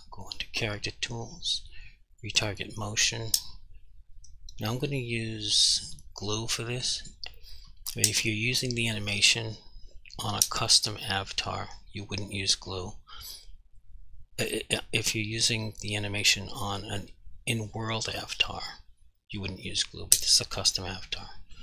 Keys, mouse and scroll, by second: 0.3 click, 6.2 click.